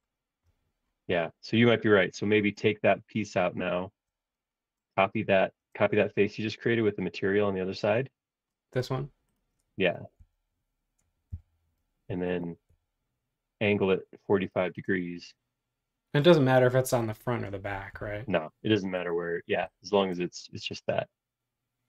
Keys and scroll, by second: 2.3 super+z, 5.7 space, 10.2 super+c, 11.3 m, 17.9 q.